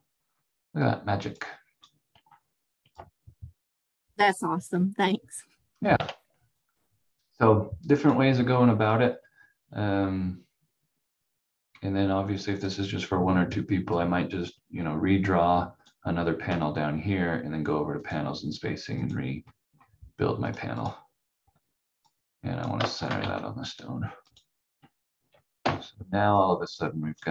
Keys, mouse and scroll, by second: 2.2 scroll up 1, 3.0 click, 5.9 ctrl+z, 8.0 click, 8.3 scroll down 1, 12.5 click, 23.2 c, 24.2 click, 25.6 F4, 26.3 click.